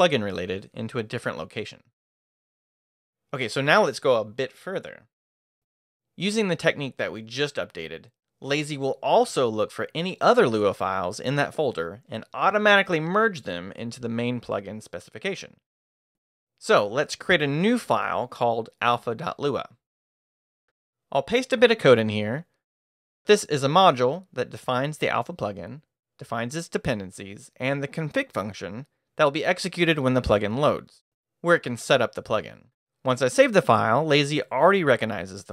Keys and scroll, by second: 0.0-0.2 typing, 4.0 q, 6.3-10.3 typing, 18.7-21.0 typing, 22.7 i, 23.1 super+v, 24.2 super+Escape, 32.8-33.7 typing.